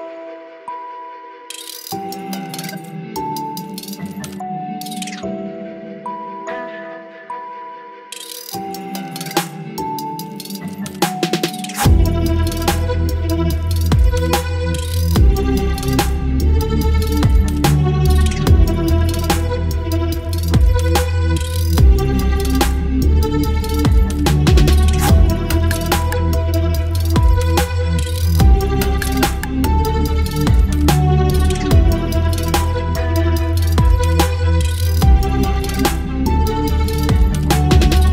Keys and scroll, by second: 6.0 space, 10.8 Delete, 11.9 ctrl+BackSpace, 14.7 Delete, 15.2 ctrl+z, 15.7 Delete, 17.4 Delete, 19.1 space, 21.7 ctrl+BackSpace, 22.9 Delete, 23.2 ctrl+z, 23.8 Delete, 26.8 space, 31.5 ctrl+BackSpace, 34.4 ctrl+BackSpace, 35.5 Delete, 37.0 Delete, 37.7 Delete, 38.0 ctrl+z.